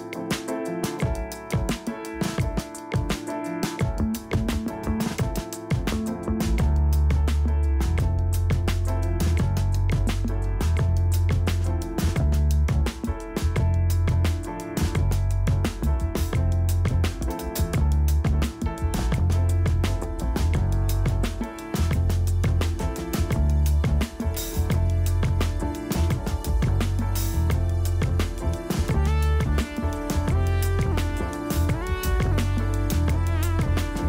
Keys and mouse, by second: 0.4-2.6 drag, 9.2 click, 9.5 click, 9.8-12.1 typing, 13.4-15.0 drag, 15.0 middle click, 16.5-18.4 middle drag, 18.6 middle click, 20.3 middle click, 20.8 middle click, 21.1-23.3 middle drag, 24.1 click, 25.8 middle click, 26.7 middle click, 28.8 click, 29.3-31.6 typing, 32.3 middle click, 32.7 z, 33.9 ctrl+z.